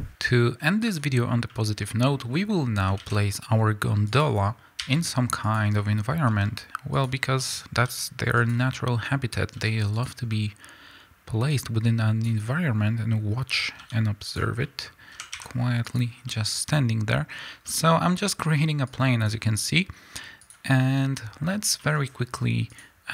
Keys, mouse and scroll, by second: 0.8 click, 1.4-5.5 middle drag, 2.5-2.9 scroll down 2, 2.9 shift+a, 4.7 s, 5.5 click, 5.6 scroll down 1, 6.2 s, 7.0 click, 7.1 scroll down 1, 7.3-8.4 middle drag, 7.8 s, 8.4 click, 8.7-10.0 middle drag, 9.5 s, 10.0 click, 10.2 scroll down 1, 10.3-11.4 middle drag, 11.4 click, 12.4 middle click, 12.7-13.2 scroll up 2, 12.8-14.3 middle drag, 13.2-13.7 scroll down 2, 13.7 s, 14.3 click, 14.5-15.9 middle drag, 15.1 s, 15.9 click, 16.2-18.8 middle drag, 17.9-18.8 scroll up 2, 18.8-20.5 drag, 20.7-22.6 middle drag, 21.0-21.6 scroll up 2, 21.6 scroll up 1, 22.6 click.